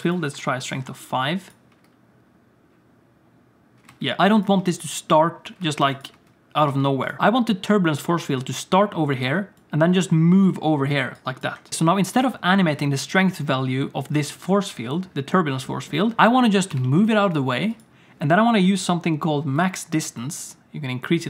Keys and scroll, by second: 1.7 space, 3.9 space, 4.6 space, 5.6-11.7 typing, 16.7 g.